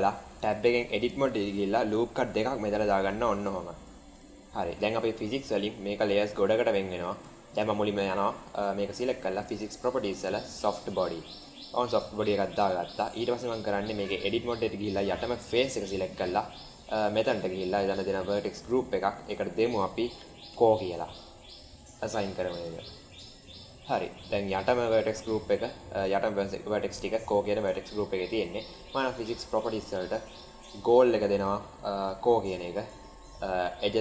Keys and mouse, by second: 0.4 Tab, 1.7 ctrl+r, 3.7 Tab, 6.5 middle click, 7.2 shift+middle click, 9.4 click, 11.3-11.7 middle drag, 11.8-12.4 middle drag, 12.6-13.2 middle drag, 13.9 Tab, 15.1 3, 17.0 click, 19.2-21.1 drag, 21.8 click, 22.6-22.9 middle drag, 23.1 Tab, 23.9 middle click, 29.3 click, 30.6 drag, 31.3 click, 33.6 click.